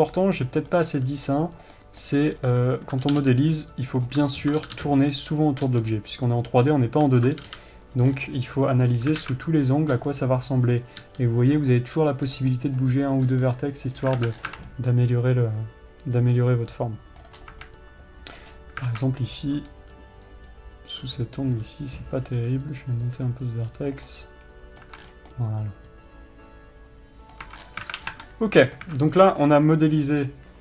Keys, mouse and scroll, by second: 0.0 click, 0.8-1.3 middle drag, 1.3 click, 2.3 middle click, 2.9 click, 3.3 ctrl+click, 4.5 click, 4.9 ctrl+click, 6.1 click, 7.2 click, 7.7 ctrl+click, 8.7 scroll down 1, 8.8-10.2 middle drag, 10.2 click, 10.5 g, 11.4 click, 12.3-13.6 middle drag, 12.8-13.6 scroll up 1, 13.6 click, 14.5-15.1 scroll down 2, 14.7 alt+a, 15.2-20.0 middle drag, 17.9 scroll up 1, 18.1 Tab, 19.0-19.4 scroll up 1, 20.0 click, 21.6 click, 22.7 click, 23.9 click, 24.6-30.1 middle drag, 25.4 Tab, 25.5-25.8 scroll down 2, 28.1-28.8 scroll down 4, 28.4 alt+a, 30.3-30.6 middle drag.